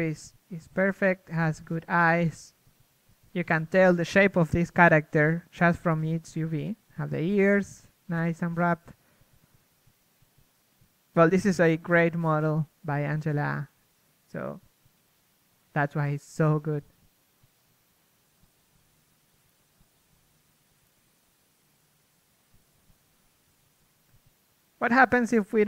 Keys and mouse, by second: 2.2 KP_1, 2.9 a, 4.3 l, 13.9 KP_3, 16.6 KP_1, 17.6 KP_3, 21.1 KP_3, 21.4 KP_1, 22.2 a, 22.7 ctrl+Tab.